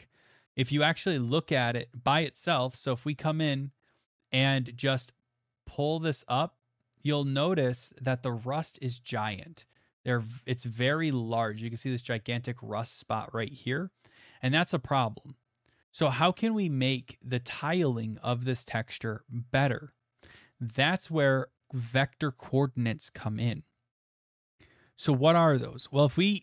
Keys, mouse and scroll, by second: 0.3 shift+middle click, 0.4 shift+middle click, 0.9 middle click, 7.9 click, 8.5 middle click, 8.6 middle click, 8.6 middle click, 9.4 middle click, 9.7 shift+middle click, 9.7 shift+middle click, 9.8 middle click, 10.3 middle click, 10.6 middle click, 13.9 middle click, 14.4 middle click, 14.5-16.9 shift+middle click, 15.3 middle click, 15.5 middle click, 15.7-16.2 middle click, 15.7 middle click, 15.8 middle click, 16.1 middle click, 16.4 middle click, 16.5 middle click, 16.8 middle click, 17.4 middle click, 17.5 middle click, 18.0 middle click, 20.6 middle click, 20.6 middle click, 21.0 middle click, 21.2 middle click, 21.2 middle click, 22.6 middle click, 23.3 middle click.